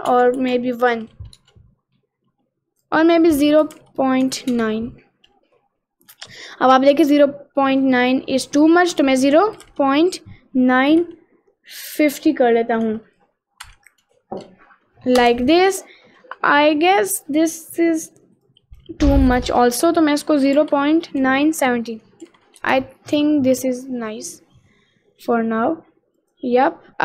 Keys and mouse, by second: 0.3 BackSpace, 3.0-4.7 drag, 8.6-15.3 drag, 18.6 click, 19.3-22.6 drag, 26.2 click, 26.9 Tab.